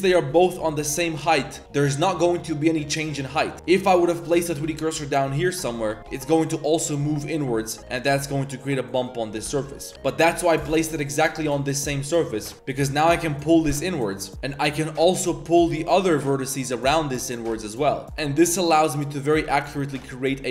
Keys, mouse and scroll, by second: 0.0 KP_3, 0.9 s, 1.6 s, 3.3-3.6 drag, 3.5 z, 4.0 1, 4.3 click, 4.6 shift+s, 5.4 click, 5.8 drag, 6.4 s, 6.9 click, 7.1 Tab, 7.3-7.6 drag, 7.8 click, 7.9 Tab, 8.1-8.5 drag, 9.0 click, 9.4 ctrl+z, 9.7 click, 9.9 ctrl+z, 10.2 click, 10.4 click, 10.6 shift+s, 12.1 click, 12.4 1, 12.8 s, 14.7 click, 14.9 click, 15.2 s, 16.6 click, 16.9 s, 17.6-18.0 drag, 18.0 s, 18.4 s, 19.2 drag, 19.5 s, 20.0 Tab, 20.0 drag, 20.4 drag.